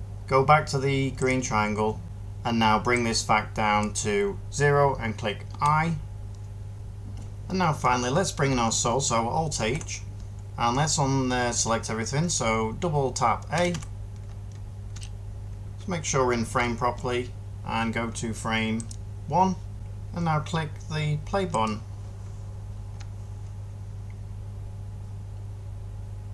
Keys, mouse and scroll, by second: 5.3-6.7 middle drag, 9.4 alt+h, 13.4 a, 13.6 a, 19.7 a.